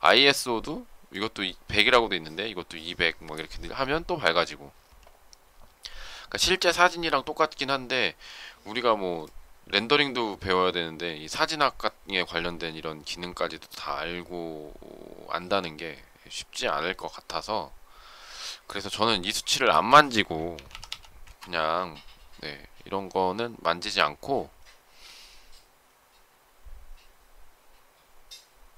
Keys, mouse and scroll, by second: 21.1 Return.